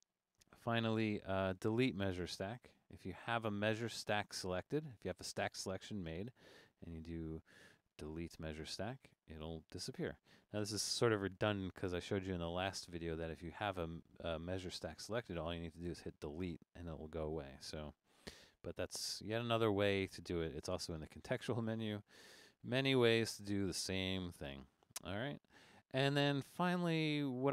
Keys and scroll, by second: 10.3 super+z, 15.9 BackSpace, 18.3 super+z, 23.1 super+z.